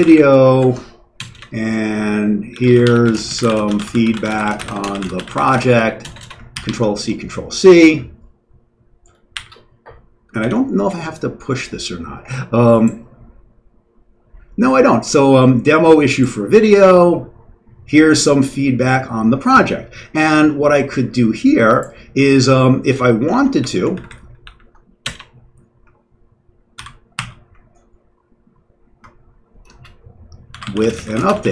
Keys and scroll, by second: 0.0-7.1 typing, 9.1-11.1 typing, 23.3 ctrl+x, 23.5 o, 23.9 ctrl+n, 24.0 ctrl+n, 24.4 ctrl+p, 25.0 Return, 26.7 ctrl+c, 27.1 ctrl+e, 29.6-31.5 typing.